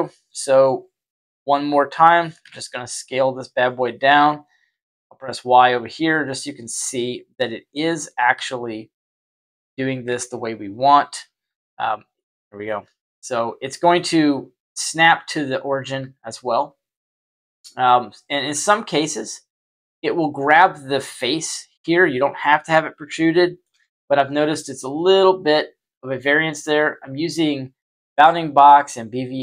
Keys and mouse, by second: 1.1 s, 2.3 ctrl+a, 4.6 y, 5.9 Tab, 8.3 s, 9.4 Tab, 10.0 Tab, 11.4 y, 12.1-12.6 middle drag, 12.8 y, 13.9-14.7 middle drag, 15.9 y, 16.4 y, 16.8-17.8 middle drag, 20.9 right click, 21.6 right click, 23.1-23.6 shift+middle drag, 23.7-29.4 middle drag.